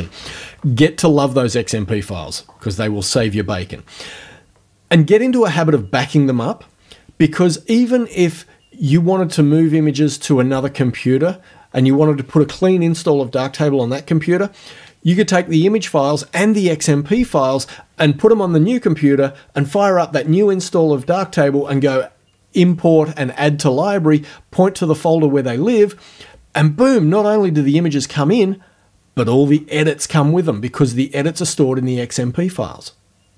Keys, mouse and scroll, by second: 22.6 click.